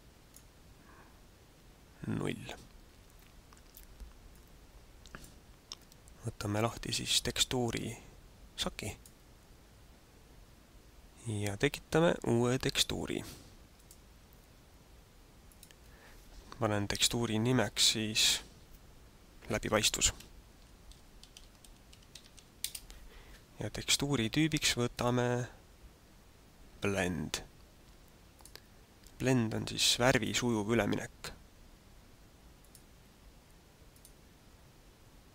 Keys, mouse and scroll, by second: 4.4 click, 8.9 click, 13.9 click, 15.4 click, 24.9 click, 29.6 click, 32.6 click, 33.9 click.